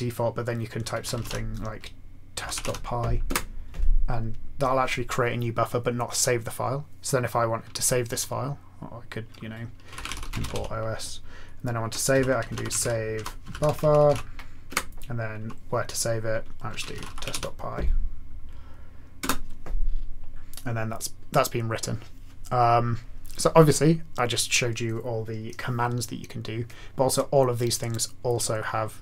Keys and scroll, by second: 0.7-3.1 typing, 3.3 Return, 9.7-11.0 typing, 12.1 alt+x, 12.1-14.5 typing, 14.7 Return, 16.4-17.8 typing, 19.2 Return.